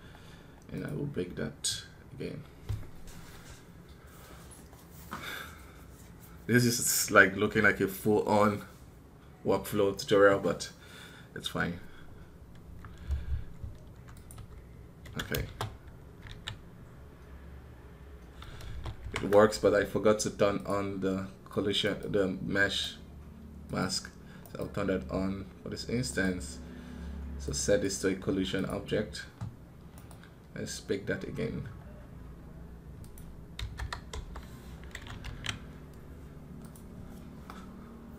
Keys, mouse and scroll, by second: 21.7 right click, 24.3 right click, 25.9 right click, 29.8 right click.